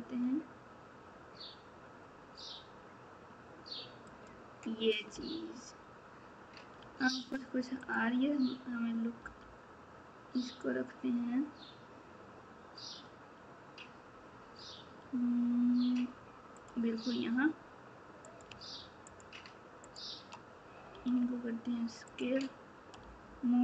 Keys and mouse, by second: 5.1 Tab, 6.8 Tab, 7.8 click, 9.2 g, 18.2 click, 19.1 shift+click, 20.9 s, 23.0 g.